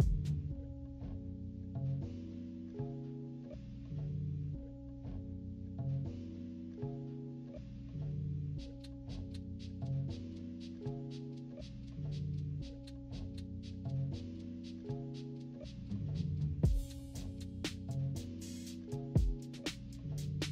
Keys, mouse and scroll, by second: 0.2 -, 0.6 =, 0.9 click, 3.3 click, 5.2 click, 6.4 -, 6.7 click, 6.9 =, 7.2 scroll down 2, 7.2 =, 7.6 click, 7.9 Delete, 8.0 click, 8.7 click, 9.5 -, 9.7 =, 10.0 click, 10.2 click, 13.2 -, 13.3 scroll down 1, 13.4 =, 13.6 click, 15.5 scroll down 1, 15.5 -, 15.6 scroll up 2, 15.7 =, 15.8 =, 15.9 click, 17.2 click, 17.3 z, 17.5 click, 18.1 z, 18.3 click, 18.5 click, 18.8 click, 19.0 click, 19.8 -, 19.9 =, 20.0 middle click, 20.4 click.